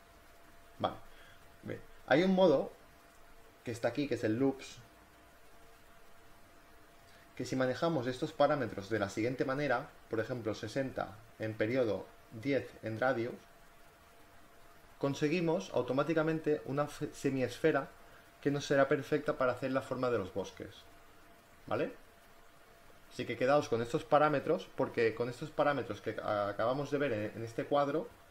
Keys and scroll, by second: 0.2 ctrl+z, 8.7 6, 9.0 0, 11.3-12.7 typing.